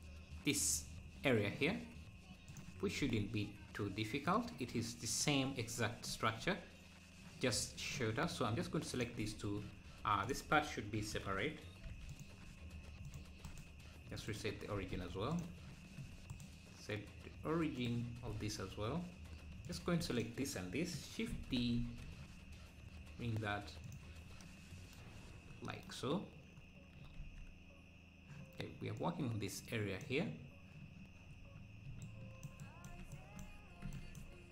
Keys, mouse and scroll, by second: 2.6 click, 3.4-4.2 scroll up 1, 9.0 click, 9.9 Tab, 11.1 ctrl+l, 12.2 p, 13.2 click, 17.8-19.7 right drag, 19.7 click, 20.2 shift+click, 21.3 shift+d, 25.3 `, 29.0-32.5 drag, 32.5-34.5 ctrl+right drag, 33.1 shift+Right, 33.9 shift+Right.